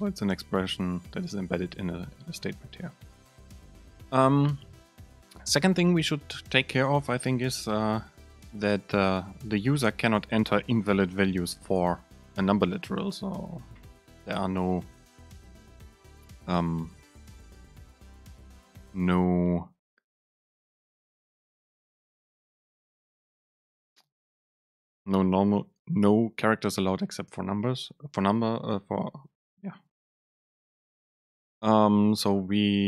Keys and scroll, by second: 14.6 BackSpace.